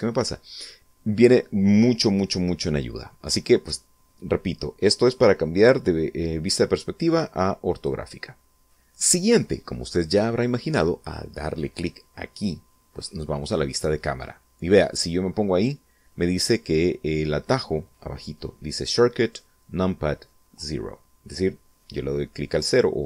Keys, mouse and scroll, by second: 6.6 click, 7.5 click.